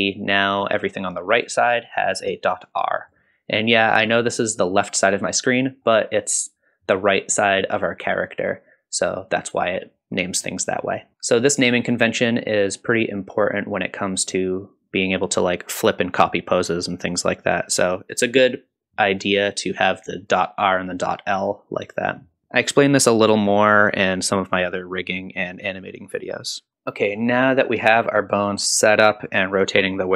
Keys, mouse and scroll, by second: 0.7-1.3 scroll up 2, 3.2-5.8 scroll down 2, 5.8-7.3 middle drag, 5.8-6.7 scroll down 1, 9.0-10.8 middle drag, 11.1-11.4 scroll down 1, 26.7 middle click, 26.7 click, 26.7-27.1 scroll up 2.